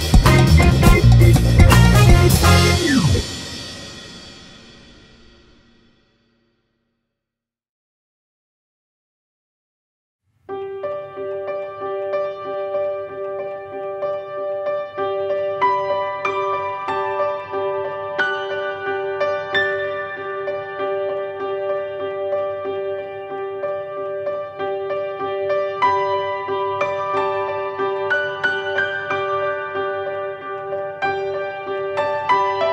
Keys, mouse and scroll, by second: 0.5 drag, 1.1-3.1 drag, 1.3 a, 1.7 scroll down 1, 2.2-2.6 scroll up 1, 4.1 g, 4.4 right click, 5.7 click, 9.1-11.5 drag, 12.5 click, 13.5 click, 13.7 Delete, 14.6 click, 15.7 a, 16.2 scroll down 1, 17.1 click, 18.4-21.5 drag, 23.7 click, 25.1 click, 29.5 click, 30.4 click, 32.1 a, 32.5 scroll down 1.